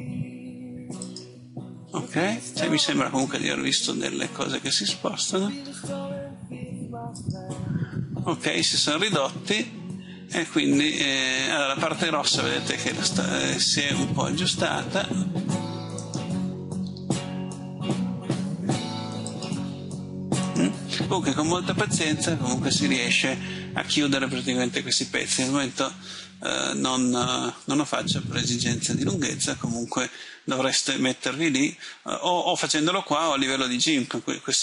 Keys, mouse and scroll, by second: 0.9 click, 4.5 right click, 5.8 g, 7.1 click, 15.9 right click, 16.9 g, 19.2 click, 20.3 right click, 21.9 middle click.